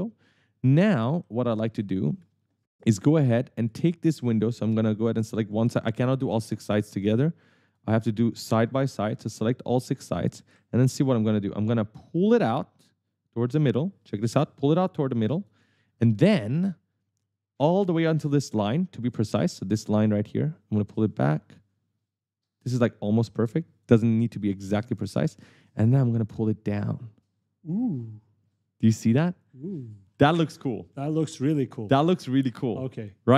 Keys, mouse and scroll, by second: 0.0-4.2 typing, 0.0 right click, 2.9 right click, 4.4 right click, 5.2 click, 5.7 right click, 5.7-8.3 typing, 6.5 right click, 7.8 shift+click, 8.2 right click, 9.2 shift+click, 9.5 right click, 13.2 click, 15.8 right click, 17.4 right click, 21.4 click, 24.4 right click, 24.4 q, 25.2 e, 26.7 click, 29.6 right click, 30.0-33.3 typing.